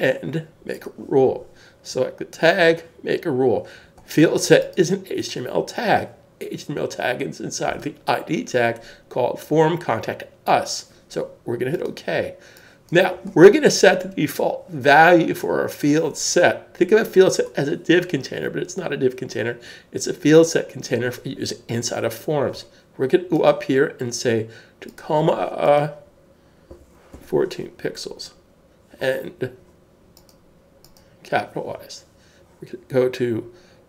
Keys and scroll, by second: 26.7-27.6 typing.